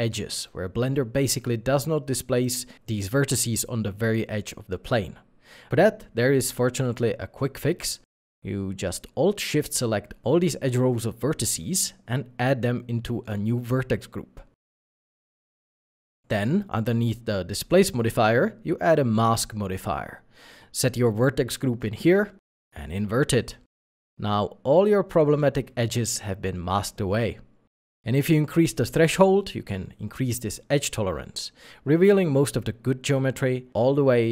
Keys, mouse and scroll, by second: 3.3 middle click, 9.1 Tab, 10.9 alt+shift+click, 11.3 Tab, 11.3 scroll down 1, 11.9 middle click, 12.5 alt+shift+click, 15.7 shift+e, 15.8 d, 15.9 g, 16.0 s, 17.5 Tab, 18.2 middle click, 28.6 ., 29.6 5, 29.7 Return, 31.3 middle click.